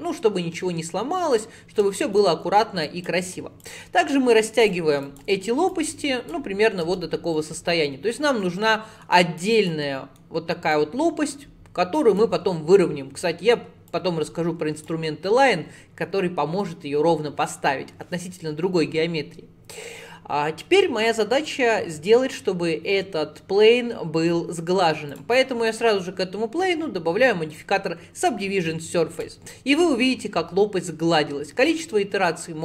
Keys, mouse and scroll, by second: 2.0 shift+middle click, 2.5 1, 2.9 click, 3.6 click, 5.1 click, 5.7 click, 6.9 Tab, 7.4 middle click, 7.9 scroll down 2, 8.3-9.4 middle drag, 9.4 click, 9.9 middle click, 10.8 click, 12.4 middle click, 13.2-13.9 scroll up 2, 13.9 click, 15.1-18.3 middle drag, 25.1 click, 25.7-28.9 drag, 31.7-32.6 drag.